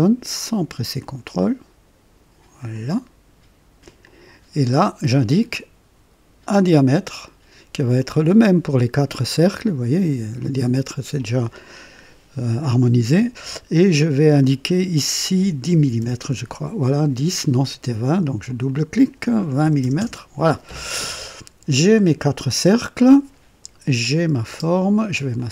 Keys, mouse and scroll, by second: 1.0 click, 2.7 click, 4.0 click, 6.5 click, 15.7 KP_1, 16.0 KP_0, 16.2 KP_Enter, 18.4 click, 19.6 KP_2, 19.7 KP_2, 19.8 KP_0, 20.0 KP_Enter, 21.7 typing, 21.9 click, 24.0 click, 24.5 typing, 25.3 click.